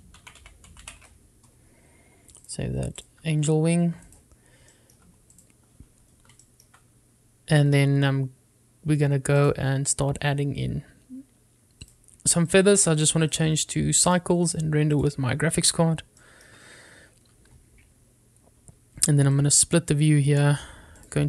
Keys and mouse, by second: 5.3 click, 5.9 shift+middle click, 7.6 shift+middle click, 10.5 click, 13.6 click, 15.3 click, 15.6 click, 17.4 shift+middle click, 20.5 click.